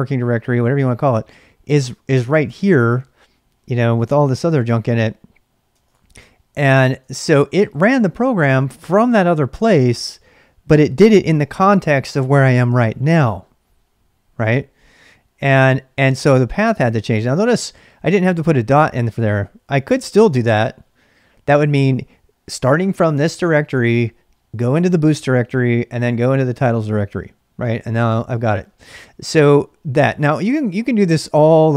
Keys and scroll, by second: 4.1-6.2 typing, 5.8 ctrl+[, 7.0 Return, 16.9 ctrl+[, 17.0 k, 19.4-20.4 typing.